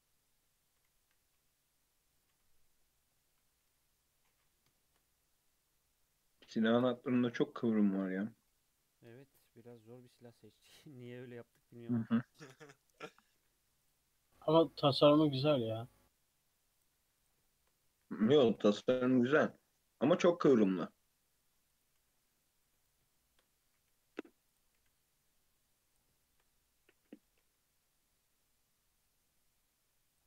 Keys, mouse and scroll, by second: 1.1 e, 2.4 Tab, 2.8-3.9 middle drag, 3.9 KP_3, 4.2-4.7 scroll down 2, 4.7-5.2 shift+middle drag, 5.2 click, 5.5 Tab, 6.7 ctrl+r, 8.3 2, 8.5 click, 9.2 shift+middle click, 9.5 e, 10.5 click, 10.8-11.3 scroll up 1, 11.3 2, 11.6 click, 12.0-13.2 shift+scroll up 4, 12.2 shift+middle drag, 13.2 g, 14.1 s, 15.3 1, 15.5 click, 15.7 g, 17.0 2, 17.2 click, 17.4-17.9 shift+middle drag, 17.9 e, 19.3 g, 20.7 g, 21.9 g, 23.1-23.7 shift+middle drag, 23.7 e, 24.8 g, 26.1-27.2 shift+middle drag, 27.2 g.